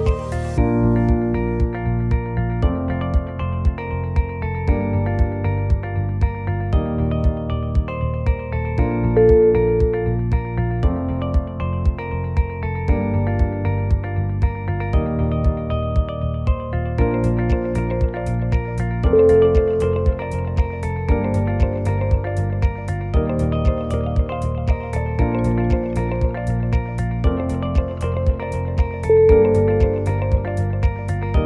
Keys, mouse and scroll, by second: 0.4 click, 1.7 click, 1.7 2, 2.0 x, 3.5 click, 3.5 1, 3.8 shift+click, 4.1 shift+click, 4.2 shift+click, 4.8 shift+click, 4.9 f, 5.5 click, 5.6 shift+click, 6.0 shift+click, 6.2 f, 6.5 click, 6.7 shift+click, 7.3 shift+click, 7.5 shift+click, 7.6 f, 7.9 click, 8.2 shift+click, 8.7 shift+click, 9.0 shift+click, 9.0 f, 9.2 shift+middle click, 9.3 shift+middle click, 9.4 shift+middle click, 9.6 click, 9.9 shift+click, 10.3 shift+click, 10.9 shift+click, 11.2 f, 11.9 ctrl+r, 12.9 click, 13.2 shift+click, 13.6 shift+click, 13.9 shift+click, 14.0 f, 14.5 click, 14.7 shift+click, 15.2 shift+click, 15.5 f, 15.8 click, 16.1 shift+click, 16.5 shift+click, 16.8 shift+click, 16.9 f, 17.1 click, 17.4 shift+click, 17.8 shift+click, 18.1 f, 18.4 click, 18.7 shift+click, 19.1 shift+click, 19.4 shift+click, 19.6 f, 20.3 shift+click, 20.6 shift+click, 20.7 f, 21.0-21.3 scroll down 2, 21.9-22.5 scroll up 4, 23.0 click, 23.0-23.4 scroll up 2, 23.9 click, 25.5 o, 25.8 g.